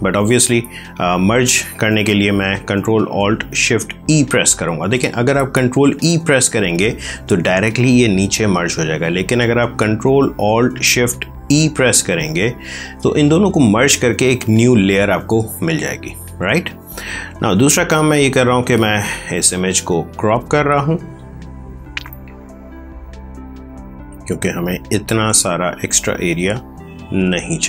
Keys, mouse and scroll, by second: 11.9 ctrl+alt+shift+e, 17.8 click, 25.8 click.